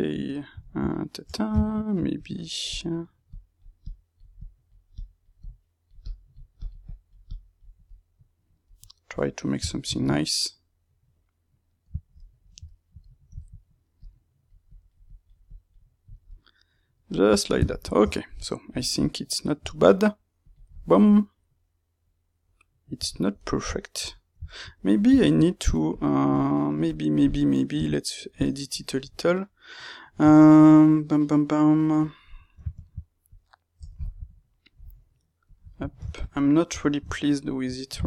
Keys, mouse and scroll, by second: 1.2 Tab, 2.1-7.8 drag, 7.8-13.9 middle drag, 13.9-16.2 drag, 16.2-20.3 middle drag, 18.0 Tab, 20.3 click, 20.9-25.9 middle drag, 25.9-33.3 drag, 35.4 click, 35.8-37.5 ctrl+middle drag, 36.7 Tab, 37.5 ctrl+right click.